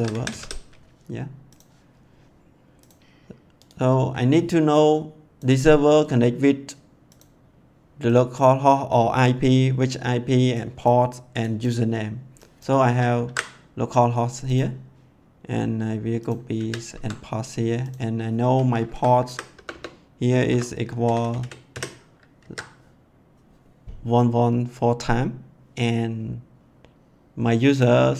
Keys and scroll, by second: 0.0-0.8 typing, 13.2 ctrl+c, 16.5 ctrl+v, 16.9 ctrl+s, 18.9 Left, 19.5 BackSpace, 20.4 =, 21.0 1, 22.4 ctrl+s.